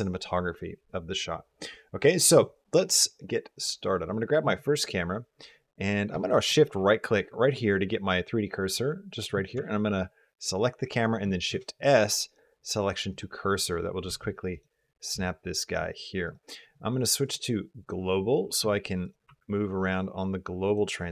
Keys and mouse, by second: 3.4 click, 11.3 shift+s, 13.9 g, 14.9 g, 17.1-17.9 drag, 18.3 g, 19.4 r.